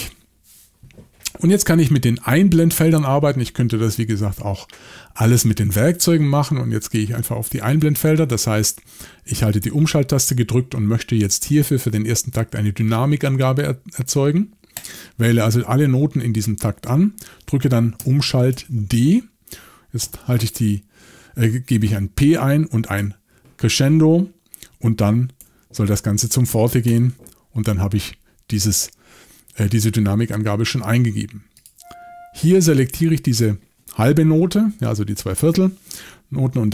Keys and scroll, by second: 18.5 shift+d, 20.0 p, 23.0 <, 25.4 f, 26.9 Return.